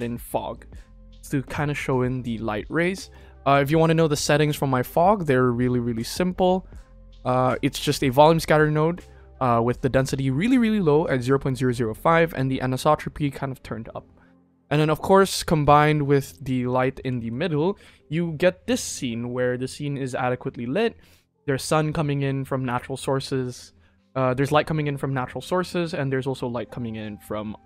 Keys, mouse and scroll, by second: 3.0 click, 4.3 click, 16.2 click, 17.1 ctrl+s.